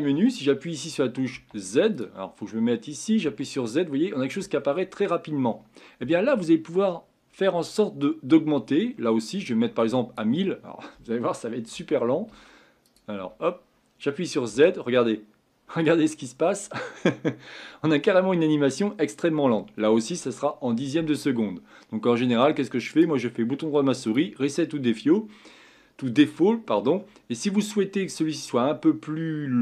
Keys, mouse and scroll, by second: 1.9 click, 3.2 z, 13.2 Escape, 14.5 z.